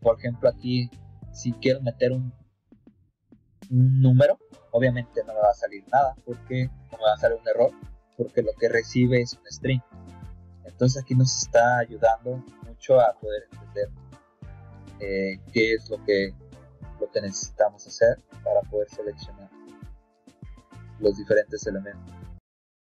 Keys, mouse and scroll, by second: 11.2-12.4 scroll down 6, 22.7 click.